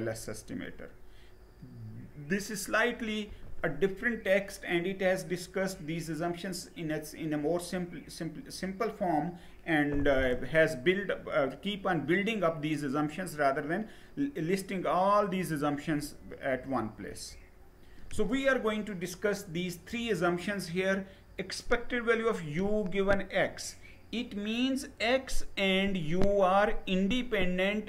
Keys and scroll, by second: 16.6 Page_Down.